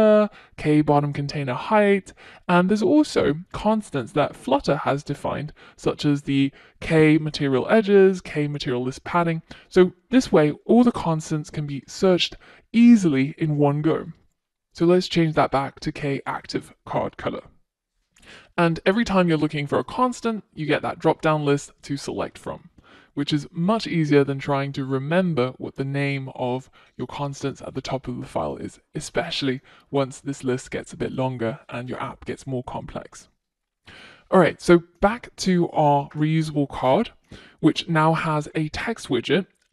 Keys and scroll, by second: 14.8 Return.